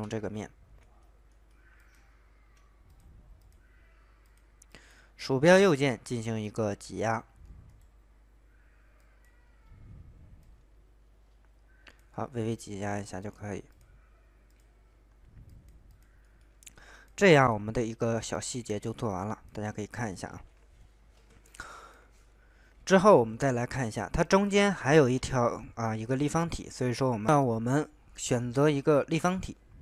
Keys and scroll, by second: 23.0 alt+Tab.